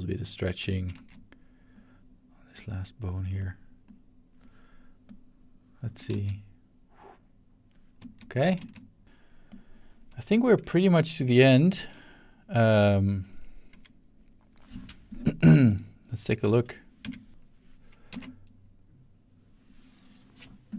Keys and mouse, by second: 0.9 ctrl+z, 1.7 ctrl+click, 2.6 click, 3.9 click, 5.1-5.9 drag, 6.1 space, 8.0 space, 8.3 click, 8.6 space, 9.5 click, 12.8 click, 15.7 click, 17.0 c, 18.1 space.